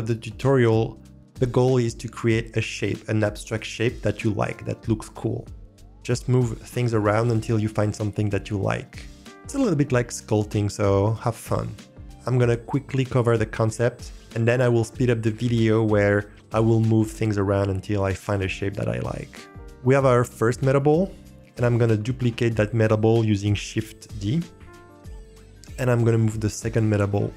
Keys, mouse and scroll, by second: 20.8-21.6 scroll up 2, 21.6-22.2 middle drag, 24.5 shift+d.